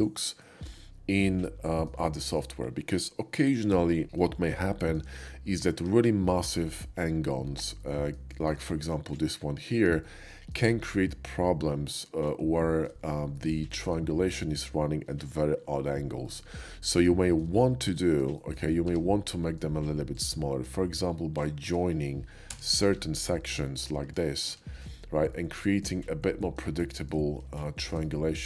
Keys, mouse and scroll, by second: 1.7 shift+middle drag, 2.0-2.4 shift+middle drag, 4.2-4.7 middle drag, 4.8 shift+middle click, 5.5 shift+middle drag, 5.8 Tab, 7.8 middle click, 8.3 shift+middle click, 9.1 click, 10.0 shift+middle click, 11.1 shift+middle click, 11.5 shift+middle click, 12.6 shift+middle click, 13.4 shift+middle click, 13.7 shift+middle click, 14.1 shift+middle click, 15.7 shift+middle click, 16.2 shift+middle click, 16.6 shift+middle click, 17.2 shift+middle click, 17.7 middle click, 18.5 shift+click, 18.9 Tab, 19.4 click, 19.5 middle click, 20.1 click, 21.4-22.5 shift+drag, 22.5 j, 23.5 middle click, 25.2 alt+x, 25.3 middle click, 26.8 shift+middle click, 27.6 shift+middle click.